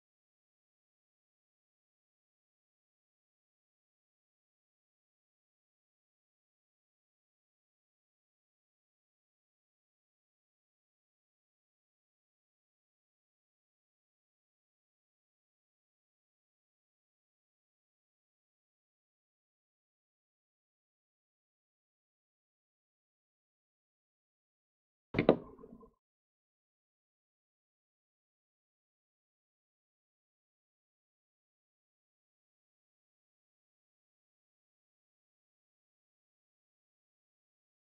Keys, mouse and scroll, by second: 5.5-7.6 middle drag, 7.6 scroll up 1, 7.8-11.6 middle drag, 18.7-19.5 scroll down 1, 19.5 shift+middle click, 20.1-20.5 scroll down 1, 20.5-27.7 middle drag, 27.7 click, 28.7-30.5 middle drag, 30.5 alt+z, 31.3 middle click, 32.0-32.6 scroll up 2, 32.6-37.9 shift+middle drag.